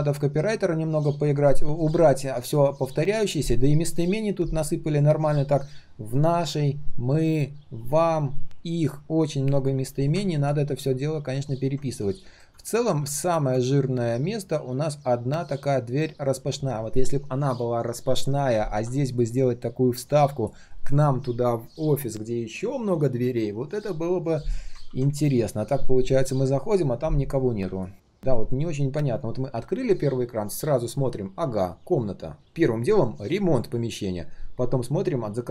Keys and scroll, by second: 24.8 ctrl+z.